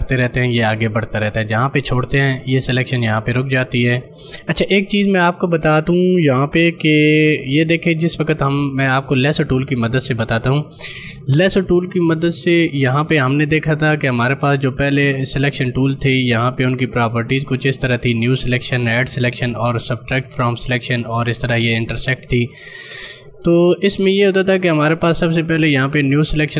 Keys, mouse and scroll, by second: 7.2 ctrl+d, 8.6 right click, 9.3 click, 25.2 click.